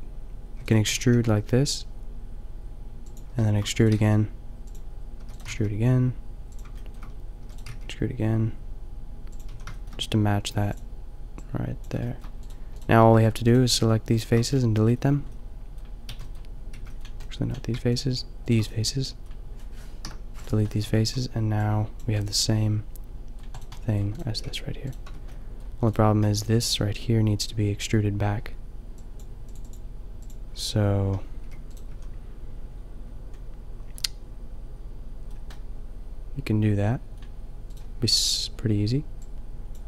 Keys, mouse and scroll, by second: 0.6 e, 0.7 click, 0.9 g, 3.0 click, 3.5 middle click, 3.7 e, 3.9 middle click, 4.0 g, 5.2 e, 5.4 g, 6.5 click, 6.9 middle click, 7.1 click, 7.5 e, 7.6-9.6 drag, 7.7 g, 9.6 a, 12.3-15.5 middle drag, 15.8 middle click, 16.1 b, 16.8 b, 18.0-20.0 drag, 20.0 Delete, 20.9 Tab, 22.6-24.3 middle drag, 24.5 g, 25.1 Tab, 26.9 middle click, 27.1 middle click, 30.3 click, 30.5-31.6 drag, 31.4 g, 31.8-34.0 drag, 31.9 a, 35.7 middle click, 36.4 middle click, 37.7-39.5 drag, 39.7 click.